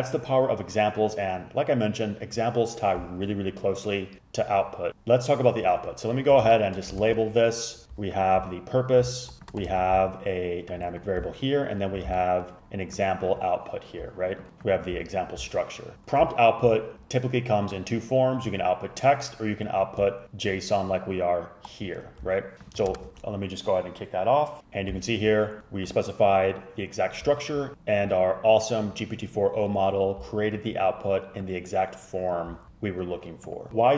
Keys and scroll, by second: 6.5 shift+Down, 7.1 ctrl+c, 9.8 ctrl+c, 12.2 ctrl+c, 23.0 super+Return.